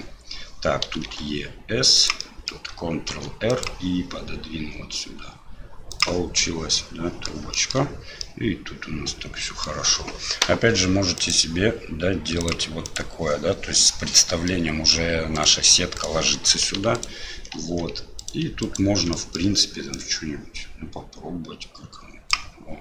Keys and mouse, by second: 2.3 click, 3.1 ctrl+r, 6.8 middle click, 7.6 shift+middle click, 8.3-9.7 middle drag, 11.2 right click, 12.9 right click, 14.6 middle click, 15.4 right click, 16.0 right click, 17.0 alt+click, 18.2 click, 18.6 alt+click, 19.1 middle click, 20.0-22.3 drag.